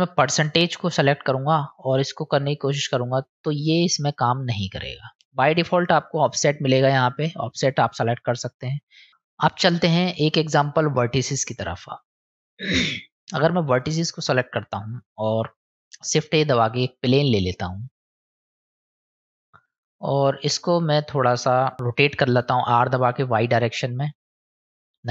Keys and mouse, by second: 1.7-6.5 drag, 9.1 click, 10.8 middle click, 13.4 click, 16.2 shift+a, 18.7 click, 19.6 n, 20.0-21.0 middle drag.